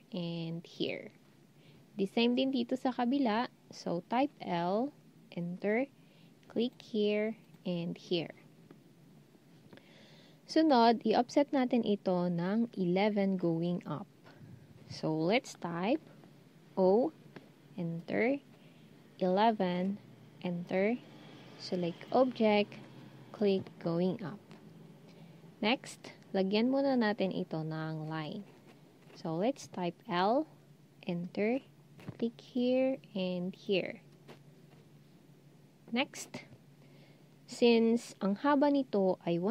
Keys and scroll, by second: 4.4 l, 16.6 0, 19.3 typing, 30.1 l.